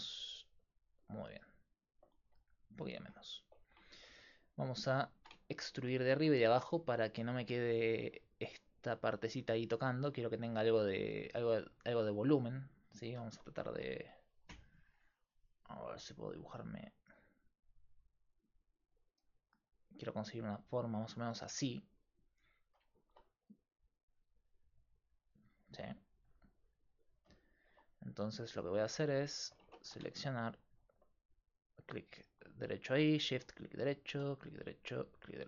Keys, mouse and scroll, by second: 2.3 s, 5.2 click, 5.3-7.7 right drag, 7.7-12.7 middle drag, 16.3 click, 17.7-21.6 drag, 19.2-27.5 typing, 24.5-26.6 drag, 29.7 ctrl+Tab, 33.6-35.3 right drag, 35.3-35.4 drag.